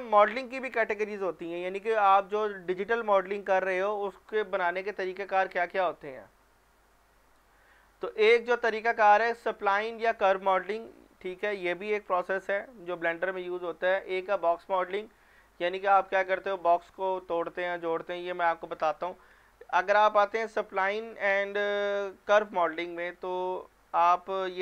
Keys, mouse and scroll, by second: 20.3 ctrl+Num_Lock, 21.2-21.7 scroll down 1, 22.2-23.0 scroll up 1, 23.0 click.